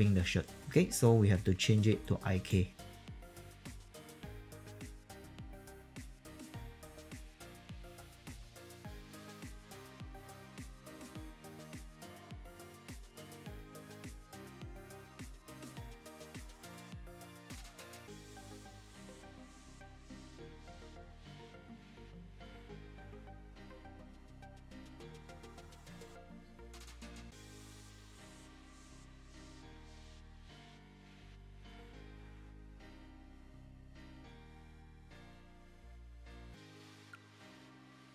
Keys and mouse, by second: 0.6 q, 1.9 alt+right click, 2.8 alt+middle click, 2.9 q, 3.0 alt+click, 3.2 alt+middle click, 3.4 click, 4.3 alt+middle click, 4.4 click, 5.0 click, 5.5 click, 5.9 alt+right click, 6.0 alt+click, 6.4 w, 6.4 click, 6.8 alt+right click, 6.9 w, 7.0 click, 7.2 q, 7.3 alt+click, 8.5 alt+middle click, 8.6 alt+click, 9.1 alt+middle click, 9.3 click, 9.7 click, 10.1 click, 10.4 click, 11.0 middle click, 11.1 click, 11.4 alt+click, 11.9 click, 12.1 alt+click, 12.2 e, 12.3 click, 12.9 Return, 13.2 f, 13.2 alt+right click, 13.5 alt+click, 14.3 alt+click, 15.1 click, 15.3 e, 15.4 click, 15.8 q, 15.9 alt+click, 16.1 alt+right click, 16.5 alt+right click, 16.6 alt+click, 17.0 ctrl+z, 17.3 click, 17.5-25.1 typing, 18.2 click, 18.7 click, 19.1 alt+click, 19.5 click, 19.9 alt+click, 20.4 click, 20.7 click, 20.9 click, 21.2 click, 21.6 click, 22.0 click, 22.5 click, 22.7 alt+click, 23.1 alt+click, 23.4 alt+click, 23.6 click, 23.7 alt+click, 24.2 click, 24.6 click, 25.0 alt+click, 25.2 click, 25.6 alt+click, 26.0 click, 26.2-37.5 typing, 26.9 click, 27.8 alt+click, 28.0 alt+click, 28.2 alt+click, 28.6 alt+click, 28.9 alt+middle click, 29.0 alt+click, 29.2 alt+right click, 29.5 click, 29.7 alt+click, 30.3 click, 30.5 click, 30.8 alt+click, 31.1 click, 31.6 alt+click, 31.9 click, 32.3 click, 32.5 click, 33.0 alt+click, 33.2 alt+click, 33.6 click, 33.7 middle click, 33.9 click, 34.7 alt+click, 35.1 click, 35.3 alt+click, 35.6 click, 35.9 click, 36.2 alt+click, 36.7 alt+click, 37.2 click, 37.4 middle click, 37.6 click, 37.9 click.